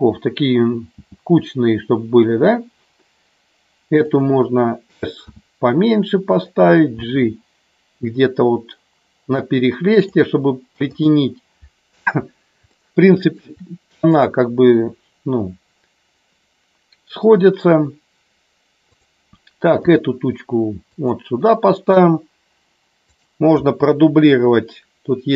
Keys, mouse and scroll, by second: 0.9 g, 4.0 click, 5.2 s, 6.9 g, 9.9 click, 12.7 shift+middle click, 14.0 click, 18.9 click, 19.9 g, 20.8 click, 23.1 click.